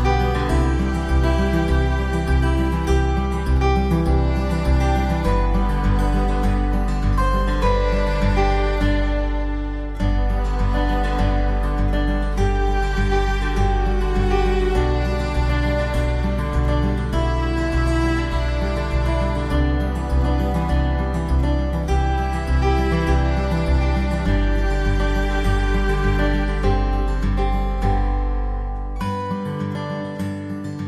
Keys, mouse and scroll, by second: 11.1 5, 12.6 Delete, 14.5 alt+w, 15.5 4, 16.7 Delete, 18.2 Delete, 19.4 alt+w, 20.8 alt+middle click.